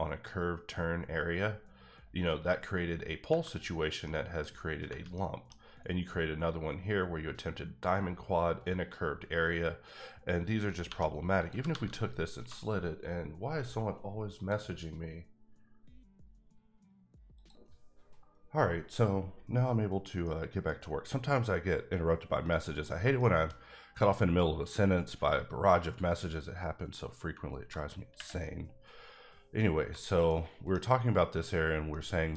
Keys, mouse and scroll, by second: 3.8 scroll down 1, 4.0 middle click, 5.1 middle click, 10.8 1, 11.4 click, 11.6 g, 11.7 g, 12.4 click, 14.4 click, 17.4 click, 22.5 middle click, 27.4 ctrl+middle click, 27.9 r, 30.2 middle click, 31.9 middle click.